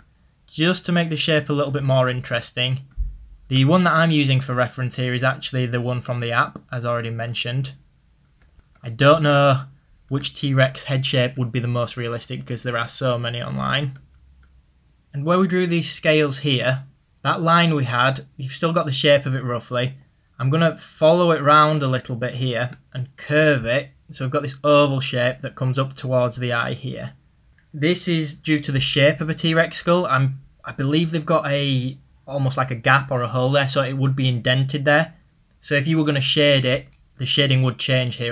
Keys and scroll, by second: 6.2 ctrl+z, 20.3 ctrl+z.